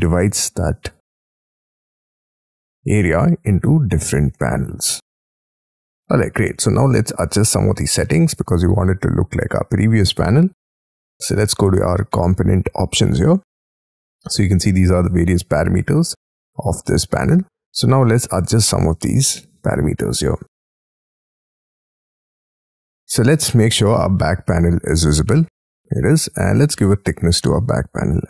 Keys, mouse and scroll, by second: 0.0-1.0 scroll up 17, 1.2-2.0 scroll down 7, 2.2 middle click, 3.5-4.3 scroll up 20, 4.3 middle click, 6.3-7.5 scroll down 13, 6.5 space, 8.0 middle click, 8.5-9.0 scroll down 13, 9.2-9.7 scroll up 13, 18.0 middle click, 19.1-19.5 scroll down 2, 23.8-24.2 scroll up 1, 24.4-25.1 scroll up 15, 25.1 middle click, 25.6 scroll down 1, 26.7-27.4 scroll up 15, 27.4 middle click.